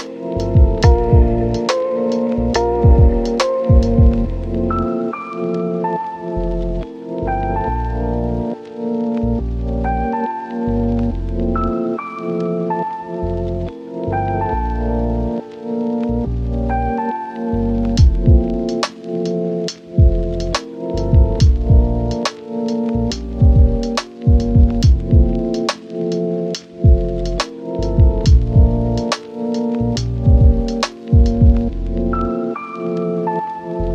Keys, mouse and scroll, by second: 0.1 scroll up 1, 0.2 right click, 0.9 click, 2.2 right click, 3.0 click, 3.2 scroll down 1, 3.3-3.8 scroll up 1, 3.8 Tab, 3.9 scroll down 1, 4.1-4.4 scroll up 1, 4.4 click, 4.6 scroll down 1, 4.8 scroll up 1, 4.9 right click, 5.0 scroll down 1, 5.1-5.5 scroll up 1, 5.5 click, 6.1-6.9 scroll up 1, 6.9 click, 7.3 ctrl+shift+click, 8.1 Return, 11.9 click, 14.3 scroll down 1, 14.5 right click, 14.7-15.2 scroll up 1, 15.2 click, 15.3-16.6 scroll up 1, 16.6 typing, 17.9 scroll down 1, 18.1-18.7 scroll up 1, 18.7 click, 19.3 right click, 20.3 scroll down 1, 20.5-23.3 scroll up 1, 26.1 click, 26.5-26.9 scroll up 1, 26.9-27.2 scroll down 1, 27.2 scroll up 1, 27.5 right click, 27.7 click, 28.1-28.5 scroll up 1, 28.5 click, 28.8-29.1 scroll up 1, 31.8 Return, 32.1 click, 32.2 scroll down 1, 32.5 Tab, 32.7 right click, 32.9 Tab, 33.0 scroll up 1, 33.3 ctrl+shift+click.